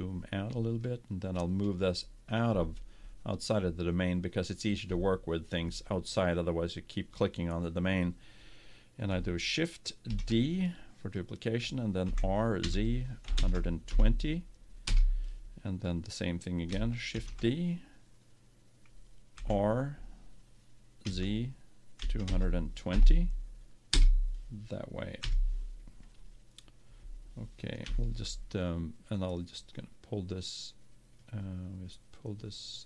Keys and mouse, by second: 10.1 shift+d, 12.0 r, 17.1 shift+d, 25.2 KP_1, 27.8 KP_7, 29.5-31.4 drag, 31.9-32.8 right drag.